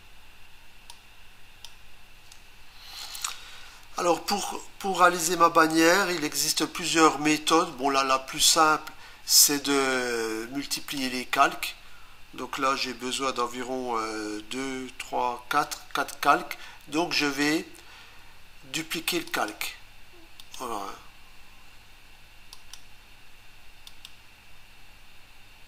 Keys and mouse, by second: 1.0 click, 10.8 click, 17.2 right click, 19.3 click, 22.6 click, 23.9 right click.